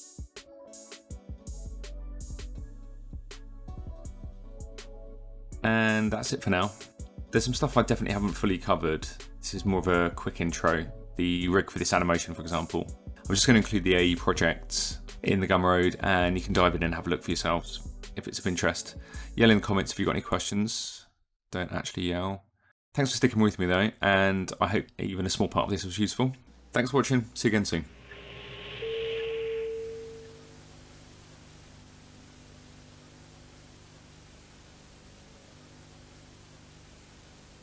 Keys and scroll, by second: 7.9 s, 19.4 KP_1, 19.7 Return, 21.4 KP_0, 21.5 Return.